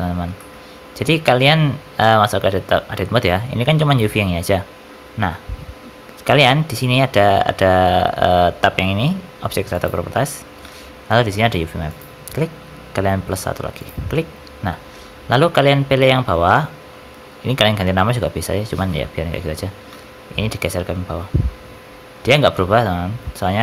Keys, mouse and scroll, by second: 0.3 shift+middle click, 0.9 Tab, 2.0 a, 9.6 click, 11.8 click, 19.8 g.